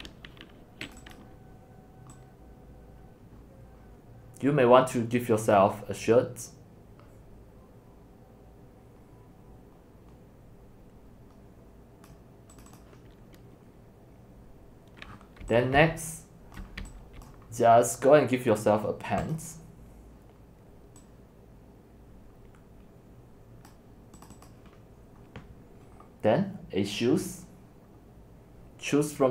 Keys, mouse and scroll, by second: 1.0 right click, 1.2 click, 3.7-6.3 drag, 12.1-15.1 drag, 15.1-15.4 scroll down 9, 16.0-17.3 typing, 16.7 right click, 17.3-18.8 right drag, 20.3 scroll down 1, 21.6 click, 22.5 scroll down 1, 24.3-29.3 drag.